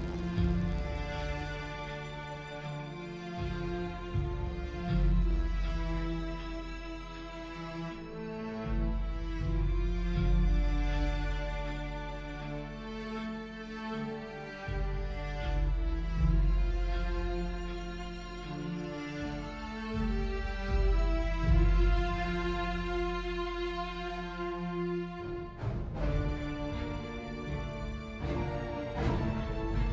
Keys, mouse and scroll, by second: 1.0 Delete.